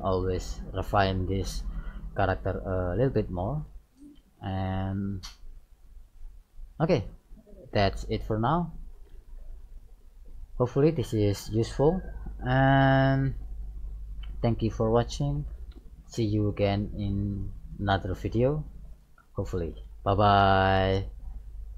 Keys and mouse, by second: 2.7 middle click, 4.8-6.7 middle drag, 8.7-10.6 middle drag.